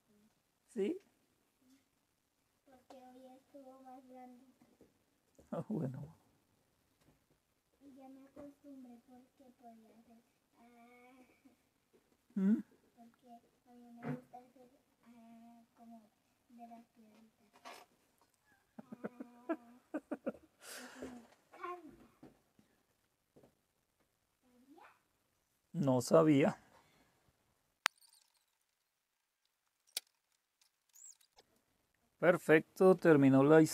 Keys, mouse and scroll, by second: 30.7 click, 30.9 scroll down 1, 31.4 click.